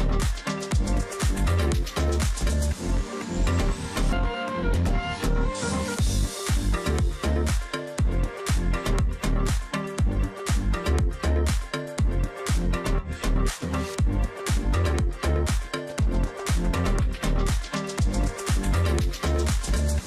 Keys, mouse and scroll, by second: 3.9-4.4 alt+scroll up 1, 9.4 double click, 15.3-18.7 scroll down 1.